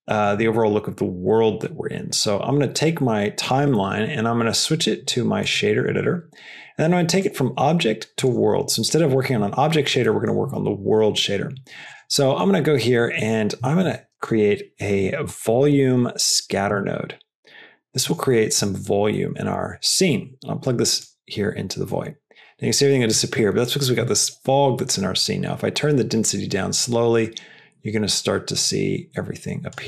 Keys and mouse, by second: 3.4-5.5 drag, 7.0-8.2 drag, 9.9 middle click, 12.1 middle click, 12.7 middle click, 13.7 shift+a, 18.3 middle click, 19.2 middle drag, 19.5 click, 20.1-21.2 drag, 21.9 middle click, 23.7-29.7 drag.